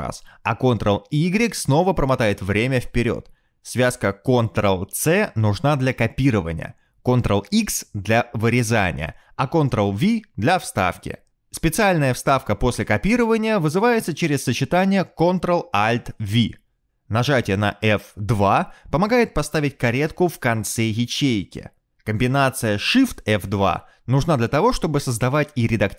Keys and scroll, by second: 1.9 ctrl+y, 2.4 ctrl+y, 7.2 ctrl+c, 7.9 ctrl+v, 9.2 ctrl+x, 10.2 ctrl+v, 11.8 ctrl+v, 13.1 ctrl+c, 13.6 ctrl+v, 16.7 ctrl+alt+v, 21.4 F2, 23.0 Escape, 25.1 shift+F2.